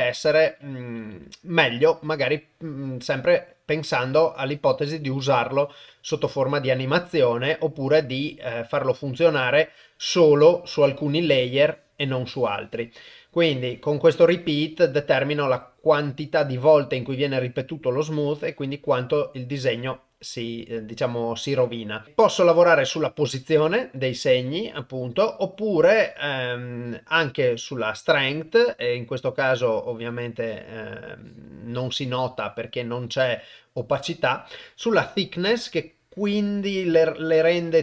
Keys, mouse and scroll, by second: 8.6-10.3 drag, 11.4-12.9 drag, 13.5-19.5 drag, 23.5 click, 30.0 click, 31.3-32.6 drag, 35.8-37.8 drag.